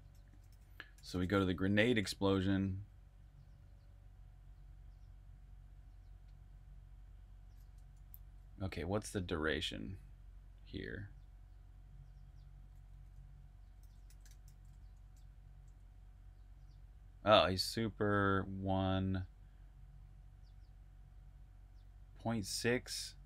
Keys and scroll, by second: 0.0-2.5 typing, 3.7 typing, 7.8 super+`, 8.7-10.5 typing, 12.3-15.4 typing, 22.9-23.2 typing.